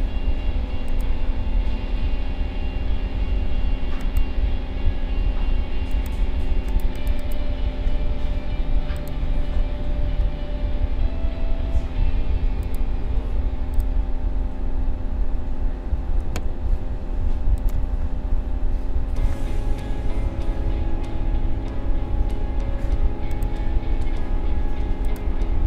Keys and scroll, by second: 16.2 ctrl+a.